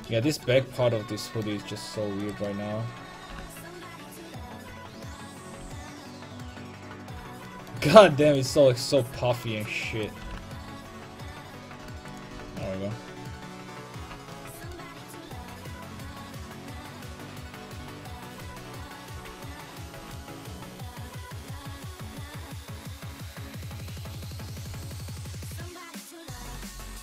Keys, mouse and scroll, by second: 2.2-5.4 right drag, 3.3 g, 5.6 a, 5.7 middle click, 9.9-12.1 right drag, 10.3 g, 12.2-13.8 drag, 12.3 a, 15.8-17.0 middle drag, 17.0 right click, 18.6 right click, 18.8-19.9 drag, 19.9 right click, 20.4-21.5 right drag, 20.5 click, 21.7 right click, 24.0 click, 26.6-27.0 middle drag.